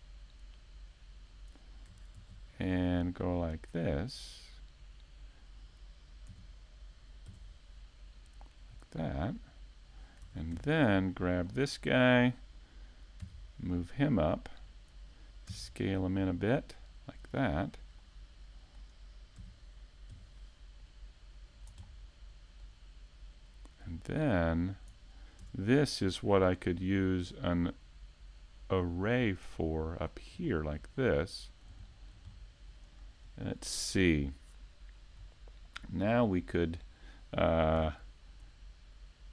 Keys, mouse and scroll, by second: 2.8 shift+middle click, 4.0-5.0 scroll up 2, 4.4 shift+middle click, 5.9 scroll up 1, 6.2 middle click, 13.1 shift+middle click, 13.5-13.8 scroll up 2, 13.8 shift+middle click, 22.7 shift+middle click, 23.3 middle click, 24.6 shift+middle click, 26.0 middle click, 26.8 right click, 29.2 Tab, 31.7 right click, 32.5 shift+s, 35.0 a, 35.1 Tab, 35.5 middle click, 36.6 shift+a.